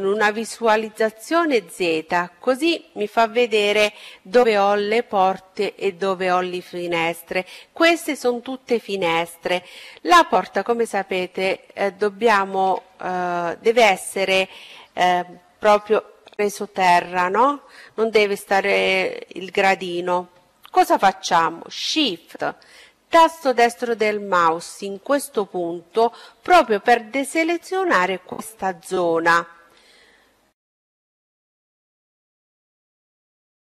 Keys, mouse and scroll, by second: 22.6-24.2 right drag, 23.5-25.8 middle drag, 24.9-27.1 right drag, 28.0-31.4 middle drag.